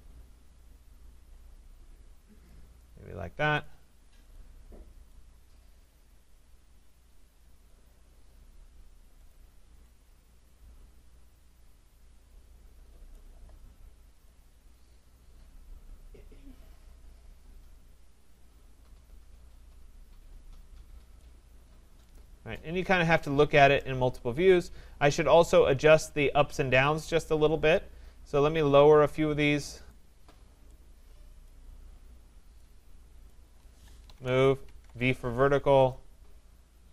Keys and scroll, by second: 34.4 Return.